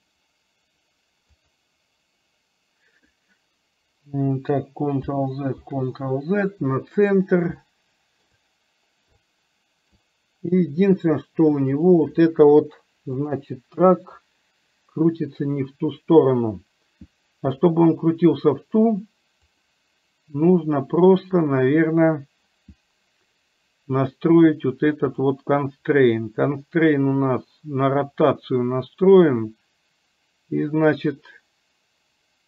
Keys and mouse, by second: 1.4 click, 5.1 ctrl+z, 7.7-8.4 shift+middle drag, 9.3-10.1 shift+middle drag, 11.8 click, 13.3 click, 17.7 click, 19.7 click.